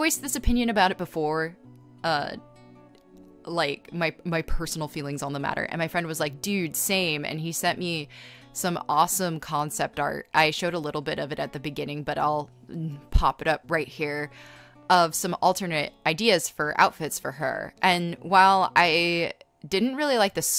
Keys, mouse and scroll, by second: 0.0-0.9 typing, 1.3 scroll, 3.5 ctrl+z, 5.5 scroll, 7.8-8.2 scroll, 11.0-13.1 typing, 19.3 space, 19.6 space, 19.8 b.